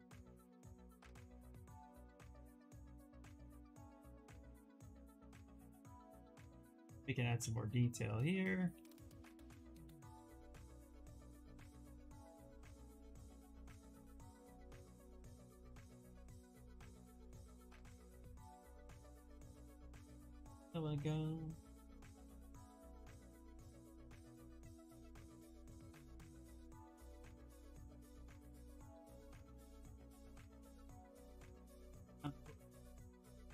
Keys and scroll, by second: 0.3-1.6 typing, 19.0 s, 23.8 s, 33.0 s.